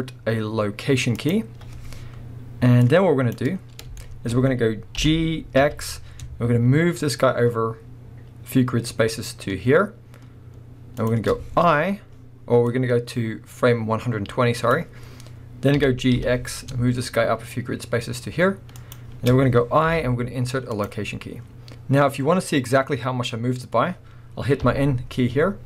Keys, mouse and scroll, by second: 2.8-4.0 drag, 3.5-4.0 scroll down 2, 4.0-11.1 shift+middle drag, 5.0 g, 11.1 ctrl+click, 12.7-14.7 drag, 15.8 g, 18.9 ctrl+click, 24.6 n.